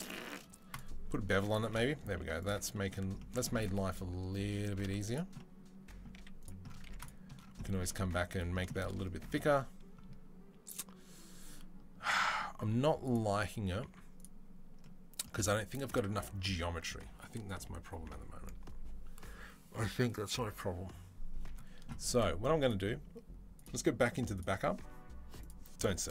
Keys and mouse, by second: 2.4-3.7 middle drag, 3.7-4.2 drag, 4.2 Tab, 4.2 middle click, 4.6 z, 5.9 z, 6.6 Tab, 6.7 click, 7.3 shift+middle drag, 8.4 shift+middle drag, 12.5 z, 13.7-22.3 middle drag, 13.7 z, 22.3-26.1 drag.